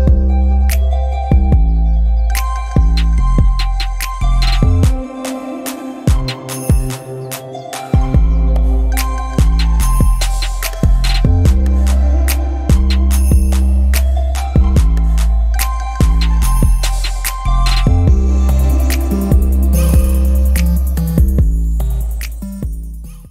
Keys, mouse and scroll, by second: 7.1 click, 7.9-9.4 drag, 17.7 click, 18.9 click, 19.7 click.